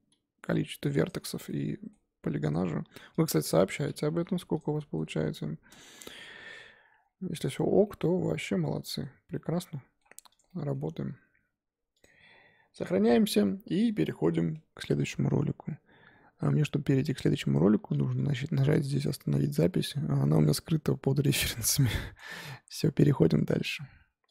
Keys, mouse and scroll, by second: 0.3 g, 1.3 z, 1.5-2.5 middle drag, 2.5 click, 2.6 middle click, 3.1 click, 3.6 middle click, 4.1 g, 4.7 middle click, 5.0 g, 5.9 Tab, 5.9 scroll down 2, 6.0 middle click, 6.7 Tab, 7.0 scroll down 4, 7.4 click, 7.5 Tab, 7.8-10.4 middle drag, 10.4 click, 10.4 scroll down 1, 21.7-24.3 middle drag.